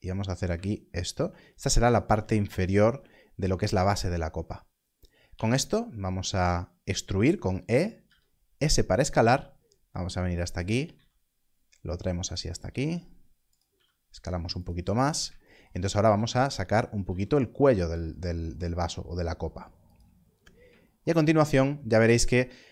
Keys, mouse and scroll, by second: 1.1 shift+click, 2.6 alt+click, 7.9 e, 10.5 click, 10.8 z, 12.2 click, 12.7 z, 13.5 click, 13.6 s, 14.5 click, 14.9 scroll down 1, 15.9 e, 19.8 click.